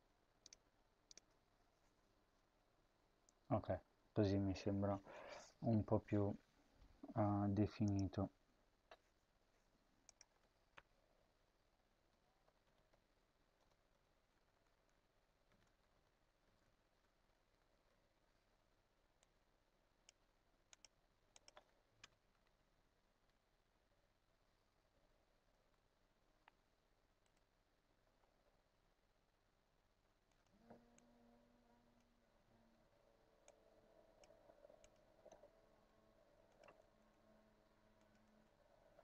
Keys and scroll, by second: 10.5 Return, 11.0 Tab, 11.7-16.6 typing, 19.9 Tab, 21.8 Return, 22.1 BackSpace, 22.9 Tab, 25.4 BackSpace, 32.5 BackSpace, 34.0 ctrl+c, 35.0 ctrl+v, 36.5 BackSpace, 36.8 BackSpace, 38.1 Return.